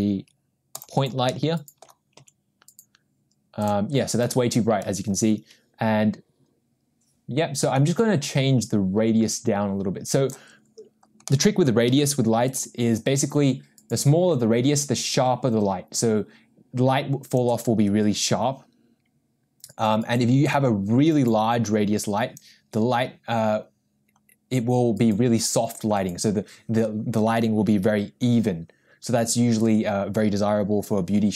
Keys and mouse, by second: 1.6-2.1 middle drag, 2.2 g, 7.8-10.3 drag, 11.9 g, 14.0-17.5 drag, 20.6-22.4 drag, 29.6-31.3 drag.